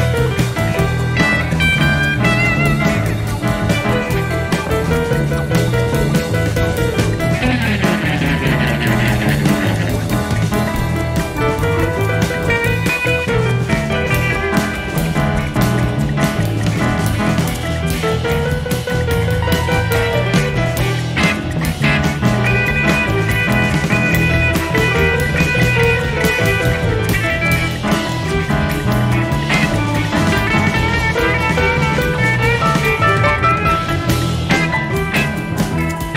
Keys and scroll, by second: 1.4 Page_Down, 1.5 Page_Up, 2.1-2.4 typing, 3.3 ctrl+d, 5.0 Page_Down, 7.6 ctrl+d, 8.5 Page_Down, 15.8 F1, 16.9 ctrl+d, 17.3 Page_Down, 23.4 F1, 24.8 shift+F6, 27.7 F1, 30.6 Page_Down, 31.2 Page_Up, 31.3 Page_Down, 31.9 -, 32.2 space, 33.9 typing.